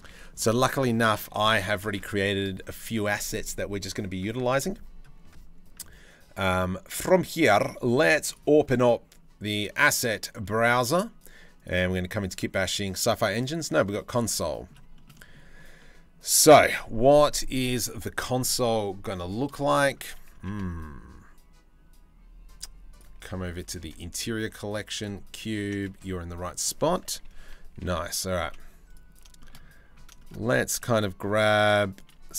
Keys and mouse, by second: 0.1 ctrl+s, 0.5-1.4 middle drag, 6.8 middle click, 8.0-10.1 drag, 11.2 click, 14.1 click, 14.6 shift+middle drag, 14.7 drag, 15.4-16.3 drag, 19.2-19.5 drag, 20.3 shift+a, 23.6 shift+a, 25.3 Tab, 25.5 s, 26.9 KP_3, 27.2 KP_1, 27.5 KP_3, 28.1 z, 28.9-30.4 shift+middle drag, 30.4 g.